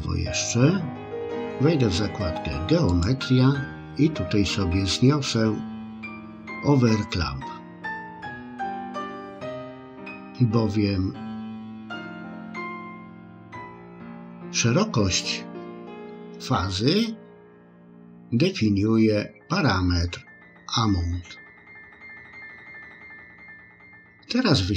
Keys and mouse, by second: 2.9 click, 7.7 click.